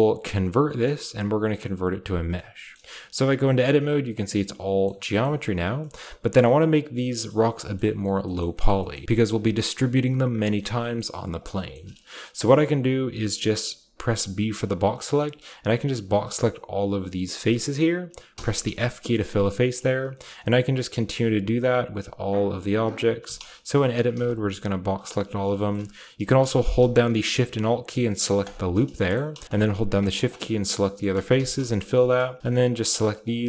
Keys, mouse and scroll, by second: 1.7-3.1 drag, 3.1 Tab, 3.4-4.6 scroll down 2, 4.8 middle click, 5.0 a, 5.2 middle click, 5.3-6.9 scroll up 1, 6.9-10.2 shift+scroll up 3, 10.2-10.9 shift+scroll up 1, 10.6-13.6 shift+middle drag, 10.6 typing, 11.9-13.6 shift+scroll up 1, 13.6 typing, 14.4-16.0 drag, 15.5-16.5 typing, 16.4 click, 18.3-21.1 typing, 20.3 middle click, 23.2-24.1 typing, 23.5 shift+middle click, 24.3-26.7 drag, 25.6-26.7 shift+scroll up 1, 26.7-27.2 alt+scroll up 1, 28.3 alt+shift+click, 31.3-32.1 typing, 32.4 shift+middle click, 32.4 click.